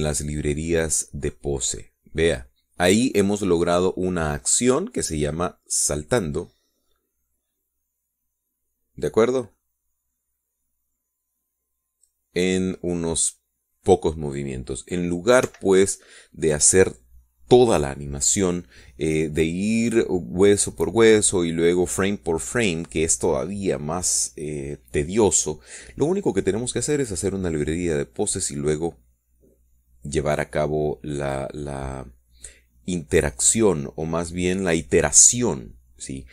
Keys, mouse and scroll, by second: 0.8-3.2 drag, 11.2-16.2 drag, 17.1 Escape.